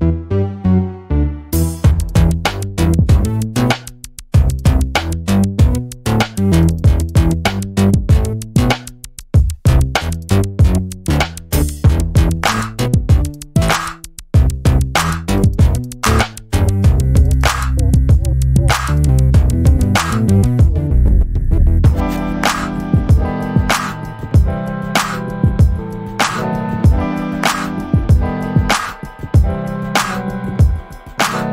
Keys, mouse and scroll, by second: 0.9 ctrl+d, 1.4-3.8 ctrl+drag, 4.1 ctrl+d, 4.3-6.3 ctrl+drag, 6.7 ctrl+d, 7.1-8.4 ctrl+drag, 9.4 ctrl+d, 9.8-12.5 ctrl+drag, 13.7 shift+click, 14.2 shift+click, 14.7 shift+click, 15.2 shift+click, 17.1 ctrl+KP_Add, 18.9 click, 19.7 click, 21.6 click, 22.0 click, 23.0 click, 24.3-26.4 drag, 26.9 click, 27.9 click, 28.7 ctrl+shift+click, 30.3-31.5 drag.